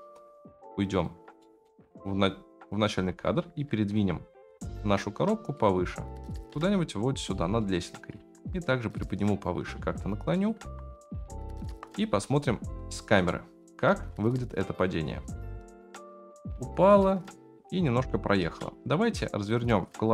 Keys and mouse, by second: 1.4 middle drag, 2.9 KP_Decimal, 3.9 KP_7, 5.5 click, 6.5 g, 7.6-8.1 middle drag, 8.1 g, 9.7 r, 10.5 r, 11.7 KP_0, 12.9 shift+middle click, 13.9 space, 18.4 space.